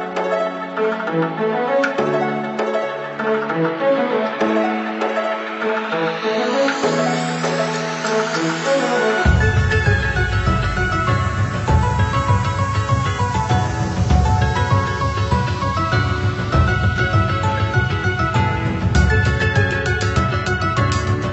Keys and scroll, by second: 1.6 ctrl+c, 1.8 ctrl+v, 16.3 ctrl+z, 21.0 Delete.